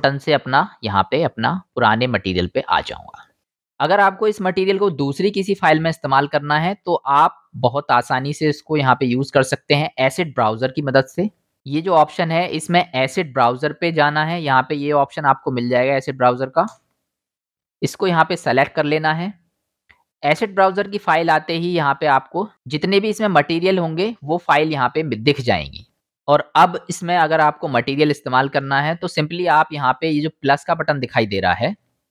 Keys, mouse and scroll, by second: 6.0 middle click, 6.0 right click, 11.1 click, 16.7 super+click, 16.7 super+middle click, 16.7 super+right click, 17.5 click, 17.5 middle click, 17.5 right click, 18.0-18.9 drag, 18.0-18.9 middle drag, 18.0-18.9 right drag, 25.9-32.1 drag.